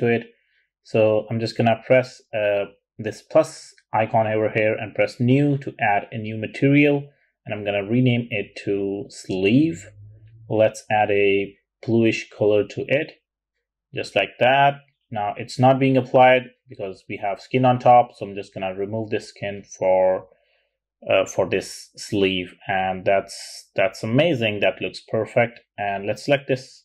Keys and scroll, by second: 8.3 super+a, 8.7-9.4 typing, 9.7 Return.